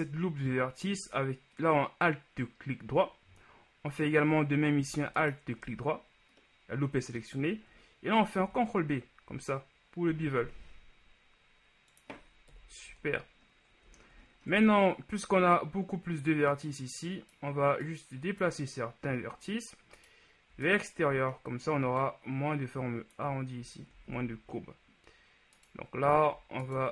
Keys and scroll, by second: 8.5 ctrl+b, 12.7 KP_1, 13.0 Tab, 14.6 shift+Tab, 24.2 ctrl+z.